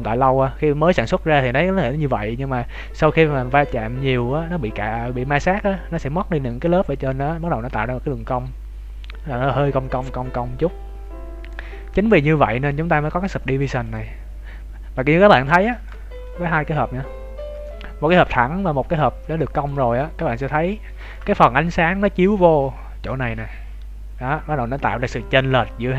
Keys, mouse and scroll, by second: 11.9-12.9 scroll up 5, 13.8 click, 14.2-15.0 scroll down 3, 14.6-15.0 scroll up 1, 15.0-15.3 scroll down 1, 15.6 shift+middle click, 16.1 right click, 17.5 middle click, 18.9 middle click, 20.0 shift+middle click.